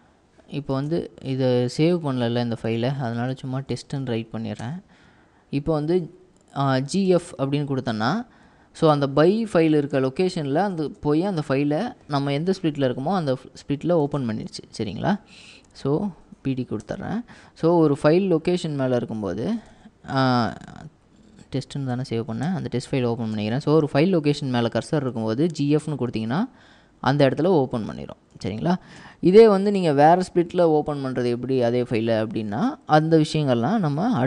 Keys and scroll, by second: 2.1-4.7 typing, 6.9 typing, 8.6-11.0 typing, 12.2-14.5 typing, 16.6-17.4 typing, 19.4-21.7 typing, 22.0 Tab, 22.5 Return, 23.2-26.4 typing.